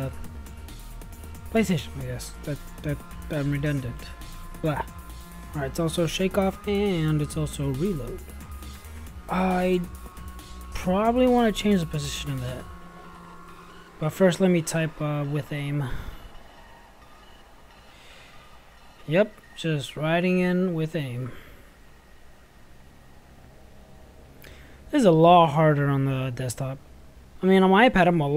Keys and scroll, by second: 18.8-19.8 typing, 22.3 ctrl+v.